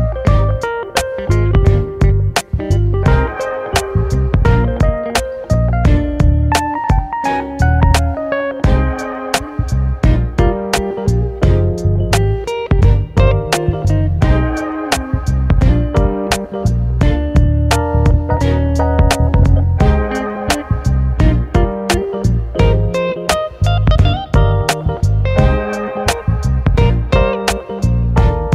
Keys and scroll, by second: 4.0 Delete, 17.8 ctrl+t.